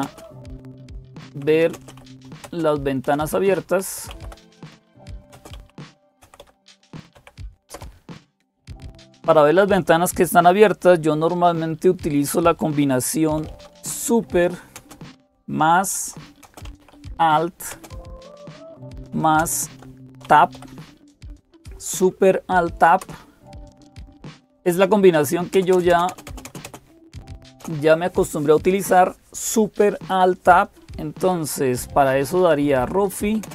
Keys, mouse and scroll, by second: 0.0-33.5 typing, 22.8 alt+super+Tab, 22.8 Return.